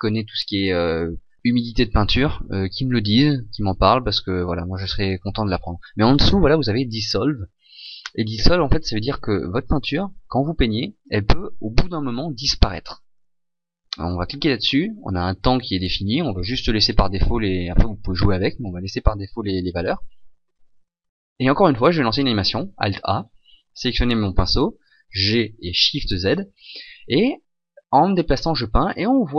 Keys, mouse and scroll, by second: 22.1 alt+a, 24.0 right click, 25.1 g.